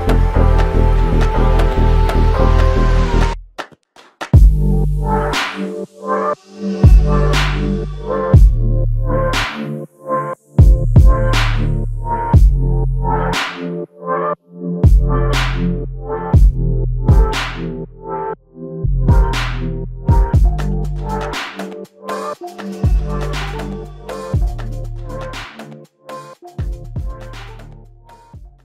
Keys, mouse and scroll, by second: 11.5 ctrl+z, 24.8 alt+click.